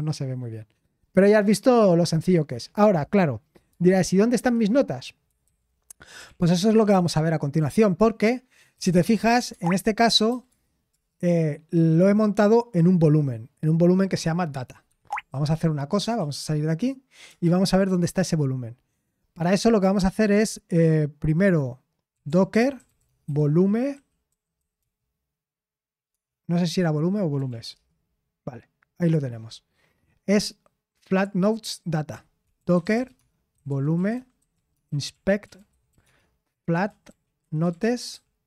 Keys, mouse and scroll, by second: 4.3 super+7, 5.4 ctrl+c, 5.9-7.2 typing, 8.5-12.5 typing, 15.7-16.7 typing, 17.3 Return, 22.8-26.1 typing, 27.1-28.0 typing, 32.8-38.4 typing.